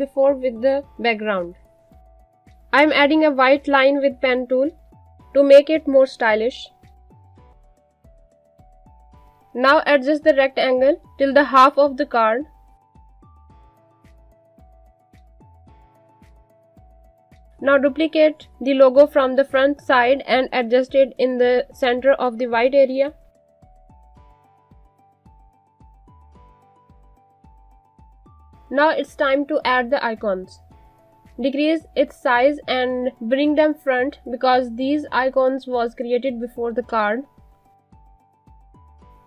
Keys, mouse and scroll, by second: 10.3 click, 11.0 click, 14.0 alt+scroll up 1, 14.6 click, 15.0 Up, 16.3 alt+scroll down 1, 17.1 click, 19.9 alt+Num_Lock, 20.0 click, 21.8 click, 23.8 alt+shift+click, 25.7 click, 26.3 Down, 26.9 click, 28.3 click, 29.3 alt+scroll down 1, 29.4 click, 32.2 shift+click, 34.4 z, 34.7 click, 36.7 right click, 37.0 click, 39.0-39.2 scroll up 1.